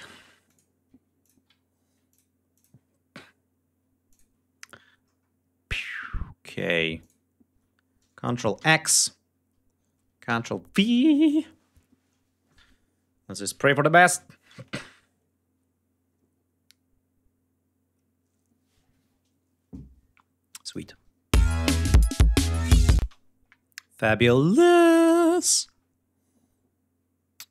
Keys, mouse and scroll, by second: 0.3 ctrl+click, 1.1 ctrl+click, 1.4 ctrl+scroll up 2, 2.0 ctrl+click, 2.4 ctrl+click, 4.0 ctrl+click, 4.9-5.8 ctrl+scroll down 5, 5.8-6.1 scroll up 2, 6.9 ctrl+click, 8.5 ctrl+x, 10.2 ctrl+v, 20.5 click, 20.7 space, 22.6 g, 22.9 space, 23.9 scroll down 2, 24.6 scroll down 2, 25.1-25.7 scroll up 4.